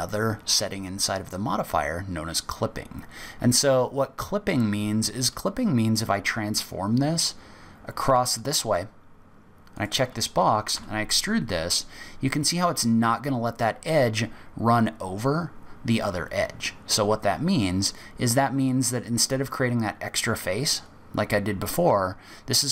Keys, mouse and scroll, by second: 9.7 click, 10.7 e.